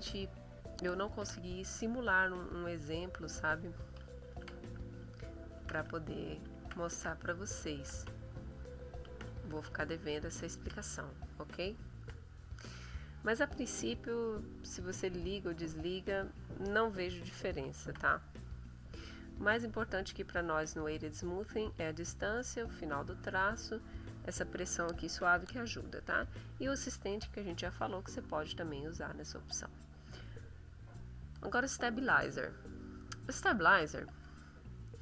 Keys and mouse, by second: 2.1 click, 3.0 click, 4.1 ctrl+z, 4.8 ctrl+click, 5.6 ctrl+z, 5.9 ctrl+click, 6.6 ctrl+z, 7.3 ctrl+middle click, 8.4 ctrl+click, 9.1 ctrl+z, 9.9-12.2 ctrl+middle drag, 12.3 ctrl+middle click, 14.8 click, 15.5 click, 16.1 click, 17.8 ctrl+z, 19.3 click, 19.6 click, 27.7 click, 29.2 click, 30.8 click.